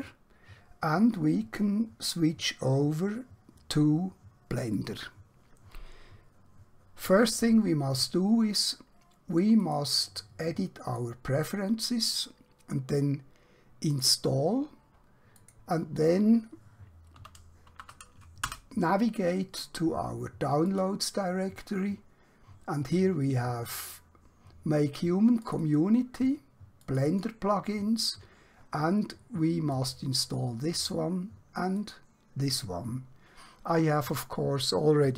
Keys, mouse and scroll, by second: 4.5 click, 5.3 click, 9.7 click, 17.1 d, 17.7 shift+;, 18.5 Return, 21.5 click, 25.4 click.